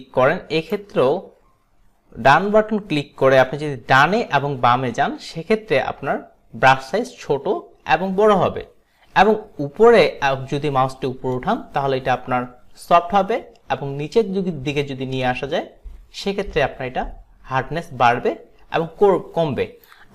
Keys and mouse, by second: 3.5 alt+right click.